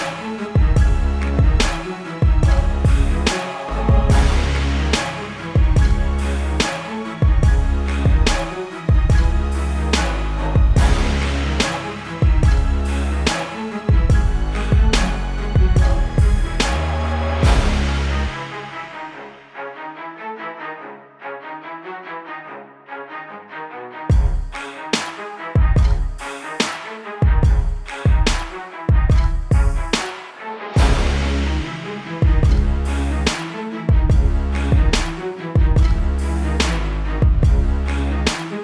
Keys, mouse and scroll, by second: 8.0 ctrl+alt+shift+e, 11.1 click, 12.4 right click, 13.9 click, 20.8 click, 23.4 space, 24.5 click.